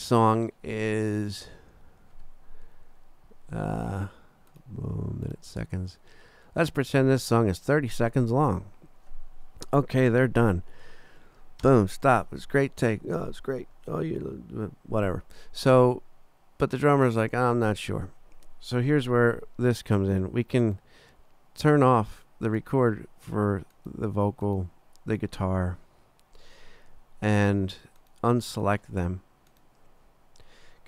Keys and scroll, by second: 11.6 space.